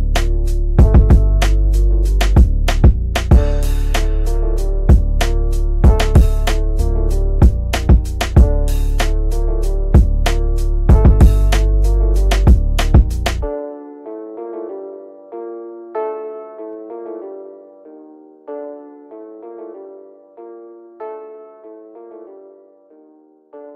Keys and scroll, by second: 7.5 F3, 20.0 g.